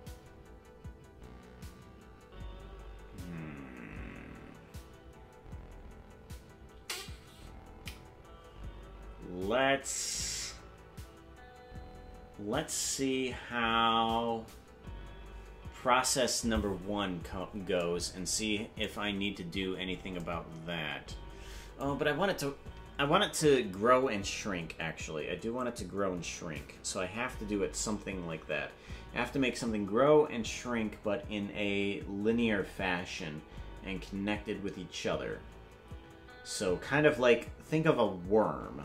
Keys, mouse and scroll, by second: 19.3-20.2 scroll down 8.